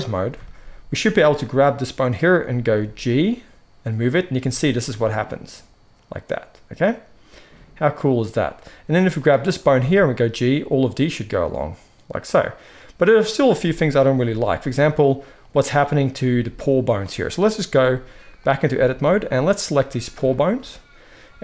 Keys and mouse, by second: 1.2-9.1 middle drag, 2.6 g, 9.1 click, 9.2-17.9 middle drag, 9.7 g, 13.6 g, 14.5 g, 16.2 g, 17.9-19.6 drag, 19.6-21.2 middle drag.